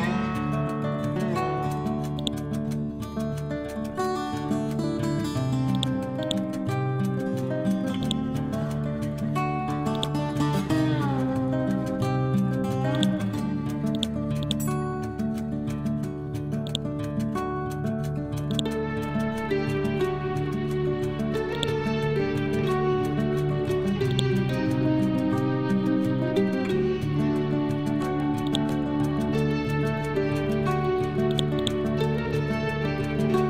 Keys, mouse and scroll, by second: 6.8 scroll down 1, 7.6-8.1 scroll up 1, 8.1 click, 9.9 click, 10.7 ctrl+z, 13.0 click, 15.1 ctrl+z, 16.7-18.5 drag, 19.2 scroll up 1, 21.6-26.2 ctrl+drag, 26.2 scroll down 1, 27.2 scroll up 1, 28.5-30.1 drag, 30.1 scroll down 1, 31.3 click, 32.0 scroll down 1, 32.7 scroll up 1.